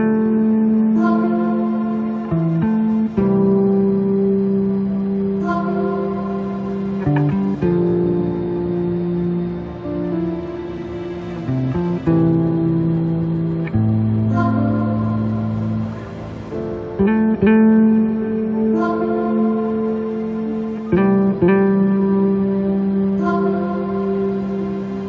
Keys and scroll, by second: 6.1 space.